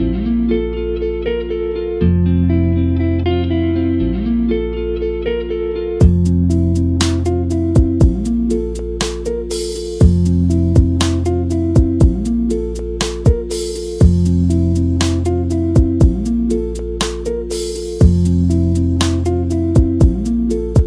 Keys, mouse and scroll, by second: 4.4 scroll up 1, 4.5 scroll down 1, 4.8 scroll up 1, 5.1-5.5 middle drag, 5.5 click, 6.2 scroll down 1, 6.4 click, 6.6 click, 7.0 KP_Decimal, 7.4 scroll up 1, 7.8 scroll down 1, 8.0 middle drag, 8.3 middle click, 8.4-10.4 middle drag, 10.7 scroll up 2, 10.9 middle click, 11.1-11.6 scroll down 2, 11.3 middle click, 11.6-13.4 middle drag, 13.4 click, 13.5 scroll up 2, 13.8-14.9 middle drag, 14.9-15.9 scroll up 3, 15.2 shift+middle click, 15.5 click, 15.6 Tab, 15.9 2, 16.1 alt+click, 16.4 click, 18.3 1, 18.5 click, 19.1 Left, 19.8 g, 20.4 Tab.